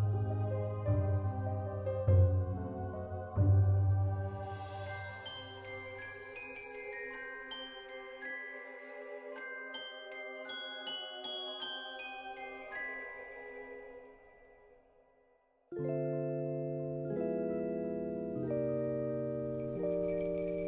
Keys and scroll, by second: 2.0 ctrl+s, 15.4 ctrl+s.